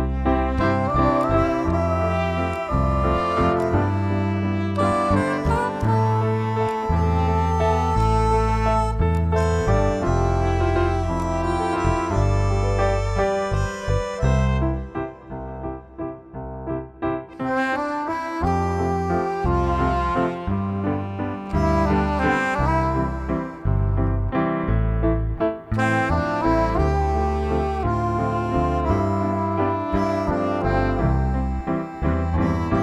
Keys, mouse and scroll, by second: 11.1 click, 13.1 ctrl+=.